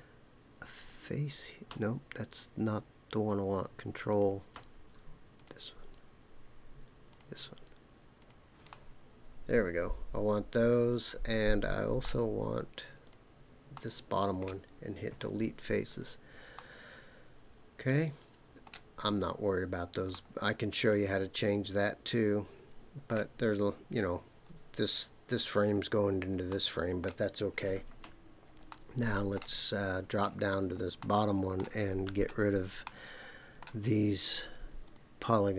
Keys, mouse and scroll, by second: 0.8 shift+click, 4.1 ctrl+click, 5.3 shift+click, 7.1 ctrl+shift+click, 8.2 ctrl+shift+click, 8.7-12.0 middle drag, 13.0 shift+click, 13.7 shift+middle click, 15.1 Delete, 16.5-18.7 middle drag, 20.1-23.1 middle drag, 26.5 middle click, 28.7 shift+middle click, 29.6-30.8 scroll down 5, 31.0 shift+middle click, 32.0-32.6 scroll up 3, 32.8 shift+middle click, 34.8 click.